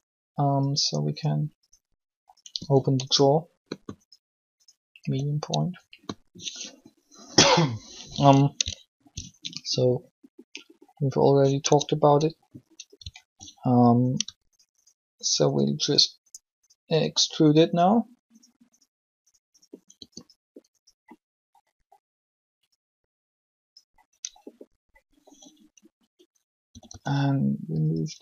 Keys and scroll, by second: 2.5 r, 5.0 r, 11.6 Tab, 19.8 shift+e, 26.5 typing.